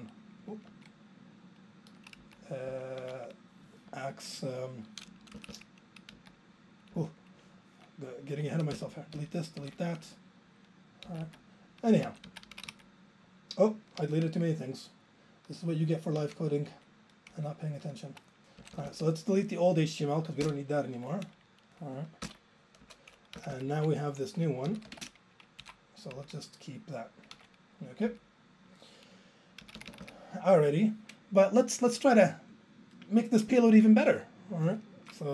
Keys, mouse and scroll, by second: 2.0 super+z, 2.2 Down, 2.7 Up, 3.0 ctrl+a, 5.4 Up, 5.5 Up, 6.2 Down, 7.0 Up, 8.8 ctrl+k, 9.1 ctrl+k, 9.6 ctrl+k, 11.1 Down, 11.2 Left, 11.9 Right, 12.0 Up, 12.3 Left, 12.5 Right, 12.6 Down, 12.7 Left, 15.3 super+z, 15.4 super+z, 16.3 super+z, 16.7 super+z, 17.3 super+z, 18.6 Up, 18.8 Up, 20.5 ctrl+k, 22.4 ctrl+k, 22.8 BackSpace, 23.4 Down, 23.6 Down, 23.8 ctrl+a, 24.5-25.3 typing, 25.7 alt+Up, 26.2 Down, 28.9 super+z, 28.9 Down, 29.6 Down, 29.8 Down, 30.0 Down, 30.1 Down.